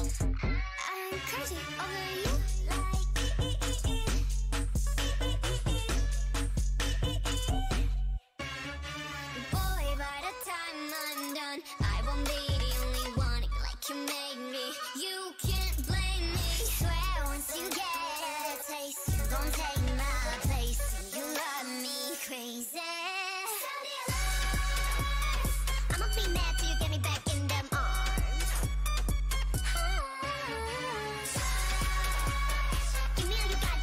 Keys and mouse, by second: 0.7 g, 1.7 g, 2.6 g, 3.5 a, 5.9 g, 7.3-9.0 drag, 9.0 g, 10.1 a, 12.4 right click, 14.3 o, 15.2 g, 17.6-19.1 drag, 18.0 g, 19.0 a, 20.2-22.2 drag, 20.7 f, 21.9 f, 22.2 f, 23.0 ctrl+z, 23.0-24.1 drag, 24.1 f, 24.2 a, 24.5-25.7 drag, 25.8 ctrl+r, 26.5 a, 26.7 k, 28.4-30.1 drag, 28.6 x, 30.2 x, 30.4 a, 31.9 ctrl+r, 32.6 ctrl+z, 33.2 ctrl+r, 33.5 ctrl+r.